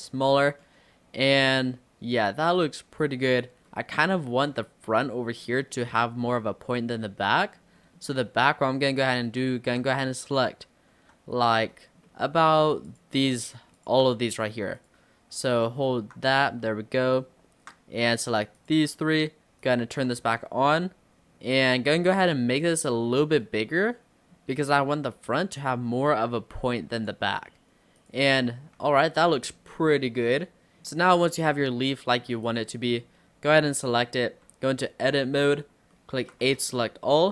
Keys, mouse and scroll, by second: 0.4 Tab, 0.7-3.4 middle drag, 3.4-3.7 scroll up 3, 3.7-4.5 middle drag, 4.5-4.9 scroll down 3, 4.9-5.6 scroll up 3, 5.6-6.1 middle drag, 6.1 Tab, 6.3 scroll up 1, 6.5-7.6 middle drag, 7.6 scroll up 2, 7.8-9.0 middle drag, 9.0 click, 10.4 click, 11.7-12.9 middle drag, 12.9 click, 13.5 shift+click, 13.8 shift+click, 14.8 click, 15.5 alt+click, 16.5-18.0 middle drag, 18.0 shift+click, 18.3 shift+click, 18.6 shift+click, 19.6 click, 20.1-20.8 scroll down 2, 20.8 s, 23.2-24.9 middle drag, 24.9 s, 28.0 click, 28.4 middle click, 28.9 Tab, 29.2 click, 29.4-30.9 middle drag, 30.9 scroll down 1, 31.0-32.5 middle drag, 32.5 click, 34.6 Tab, 35.1 click, 35.4 scroll down 5, 36.0 shift+middle click, 36.5 a, 36.8 scroll up 3.